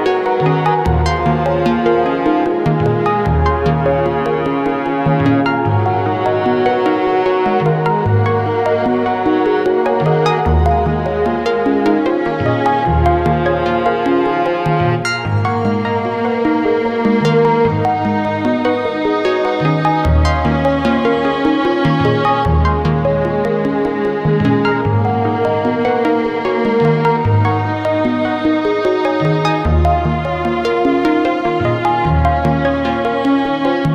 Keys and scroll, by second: 0.0-0.7 typing, 2.6 i, 2.9 k, 11.7 i, 12.2 k, 15.8 i, 16.3 k, 19.0 i, 19.9 k, 22.4-23.4 typing, 31.0-32.0 typing.